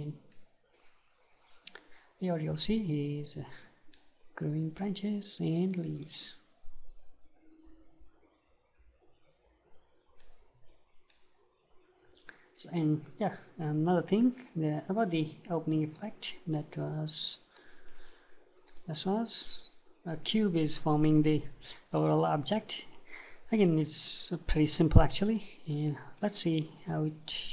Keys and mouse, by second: 0.4-16.2 right drag.